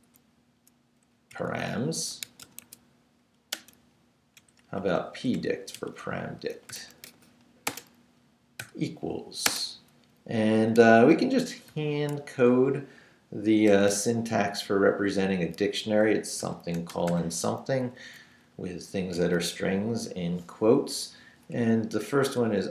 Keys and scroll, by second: 1.1-4.4 typing, 5.7-9.5 typing, 11.5 shift+[, 11.7 shift+], 12.3 shift+Left, 13.2 Left, 13.7 shift+1, 16.4 shift+;, 16.9 shift+', 17.8 Left, 22.5-22.7 typing.